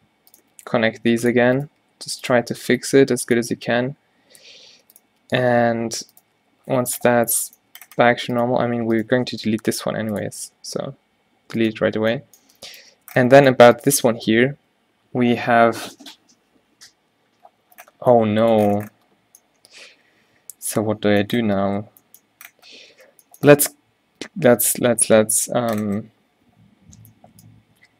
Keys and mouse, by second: 0.6 g, 1.9 g, 2.6 a, 2.8 b, 3.7 q, 4.6 Tab, 5.0 Tab, 5.3 g, 6.5 Tab, 7.9 Tab, 9.3 x, 10.7 Tab, 13.1 Tab, 16.9 Tab, 22.4 Tab, 23.1 Tab, 25.4-26.4 middle drag.